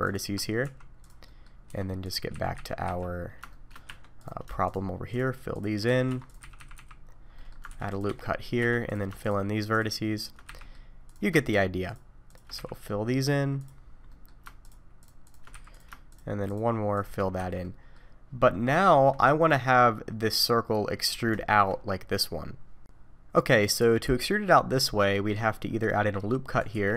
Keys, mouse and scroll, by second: 0.0 shift+click, 0.6 x, 1.2 middle click, 1.7 2, 2.0 click, 2.3 f, 2.5 f, 2.8 f, 3.5 shift+middle click, 3.9 1, 4.2 click, 4.6 shift+click, 5.1 shift+click, 5.5 shift+click, 5.8 f, 6.1 2, 6.2 click, 6.4 f, 7.1-7.6 scroll down 2, 7.3 middle click, 7.7 ctrl+r, 8.2-8.6 scroll up 1, 8.6 1, 8.9 click, 9.2 shift+click, 9.7 shift+click, 10.2 shift+click, 10.4 f, 10.6 middle click, 11.0 click, 11.4 shift+click, 11.8 shift+click, 12.3 shift+click, 12.5 f, 12.7 middle click, 13.6 click, 14.1 middle click, 14.6 click, 15.0 shift+click, 15.2 shift+click, 15.5 f, 15.7 click, 16.1 shift+click, 16.5 shift+click, 16.9 shift+click, 17.3 f, 17.6 middle click, 18.4 scroll up 1, 18.8 shift+middle click, 19.4 middle click, 20.5-21.3 scroll down 6, 21.4 shift+middle click, 22.9 ctrl+z, 22.9 alt+a, 24.8 middle click, 25.3-26.6 scroll up 1, 26.7 ctrl+r.